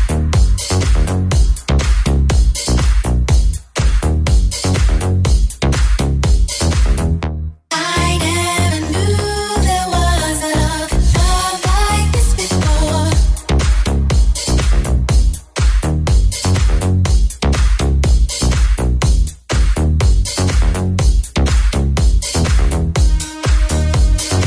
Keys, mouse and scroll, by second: 9.8-23.5 middle drag, 20.2 Tab, 21.8 ctrl+s.